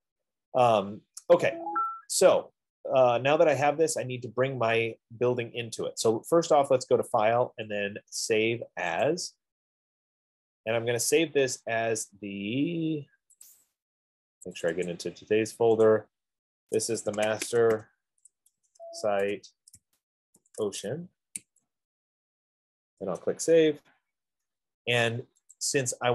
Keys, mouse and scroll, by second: 3.5 F15, 6.8 click, 9.5 click, 13.7 click, 15.0 click, 15.2 click, 16.2 click, 17.4-21.8 typing, 21.8 click, 23.5 Return, 25.9 click.